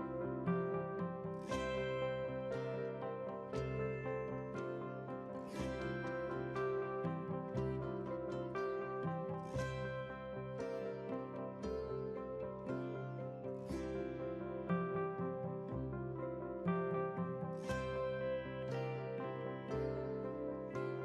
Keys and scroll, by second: 5.6 ctrl+c, 6.2 ctrl+v, 16.2 ctrl+c, 16.6 ctrl+v.